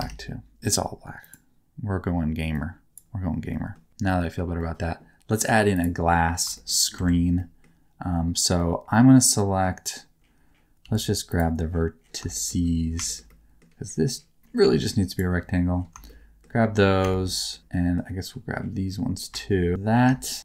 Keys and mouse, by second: 3.6 middle click, 4.3 shift+middle click, 4.6 middle click, 6.0 middle click, 6.5 shift+middle click, 6.9 Tab, 7.3 middle click, 8.5 middle click, 10.8 1, 12.3 shift+middle click, 13.0 shift+middle click, 13.2 middle click, 16.0 shift+middle click, 17.1 shift+middle click, 17.5 middle click, 20.2 shift+middle click.